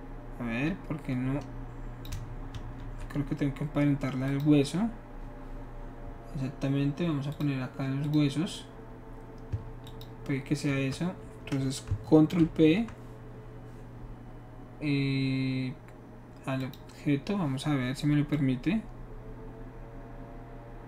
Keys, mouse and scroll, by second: 2.5 ctrl+z, 4.3 click, 7.3 click, 8.0 click, 9.8 shift+click, 12.4 ctrl+p, 16.6 click, 18.3-20.1 drag.